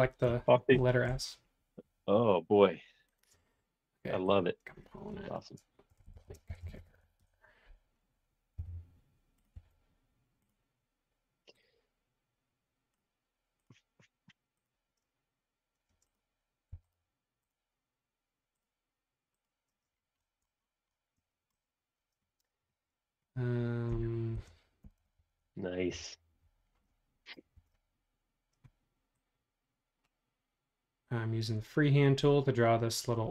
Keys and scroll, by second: 5.6-7.5 typing, 8.5 m, 16.0 space, 16.7 m, 19.8 space, 24.1-25.7 typing, 25.9 Return, 27.5 super+1.